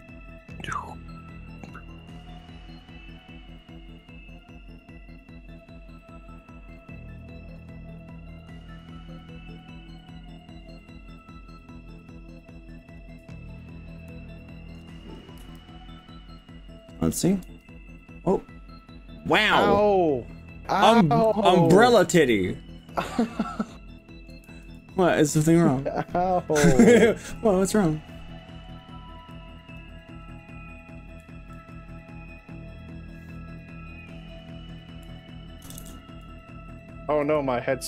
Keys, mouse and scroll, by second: 16.6 r, 17.6 s, 21.4 click, 21.6-24.4 middle drag, 24.6 ctrl+z, 25.0-26.5 middle drag, 29.4 click, 31.7-34.8 middle drag, 31.7 click, 35.8 ctrl+KP_Add, 37.4 g.